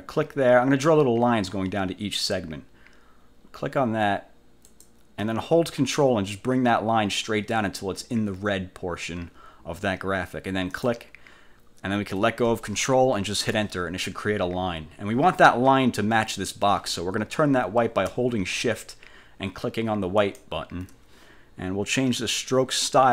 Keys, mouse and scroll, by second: 4.8 click, 10.8 ctrl+click, 13.5 Return, 20.4 shift+click, 23.0 click.